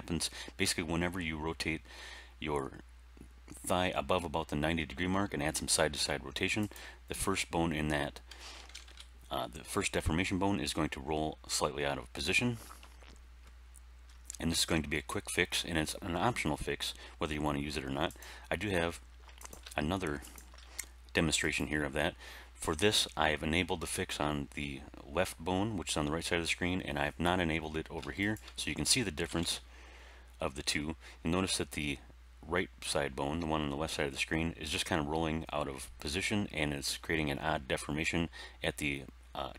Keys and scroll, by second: 8.5 alt+r, 8.6 alt+g, 8.8 alt+s, 29.2 r.